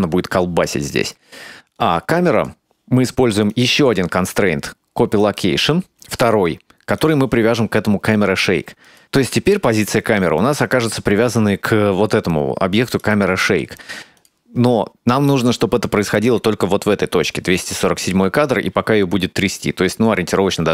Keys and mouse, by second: 2.0 click, 3.2-4.5 drag, 6.5 click, 10.0-10.6 shift+middle drag, 12.9 right click, 14.3 click, 16.3-20.7 drag.